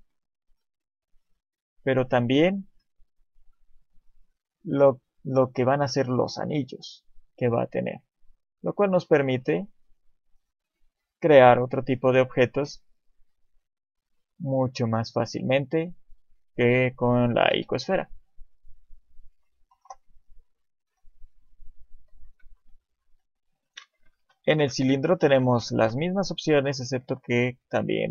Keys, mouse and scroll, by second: 2.1 middle click, 4.5 click, 10.1 middle click, 12.6 click, 16.7 middle click, 17.5 KP_7, 18.5 shift+middle click, 19.7 Delete, 20.9 shift+a, 24.0-24.4 scroll down 3, 24.3 middle click, 25.2-26.7 scroll down 1, 26.7 click, 26.7-27.3 scroll down 1.